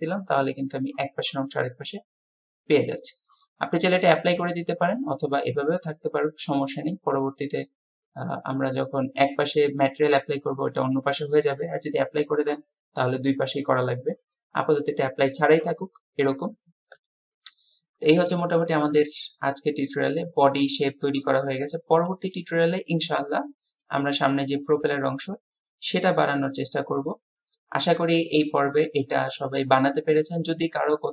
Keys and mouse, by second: 6.0-10.0 middle drag, 18.8-24.0 middle drag, 25.4-31.1 middle drag.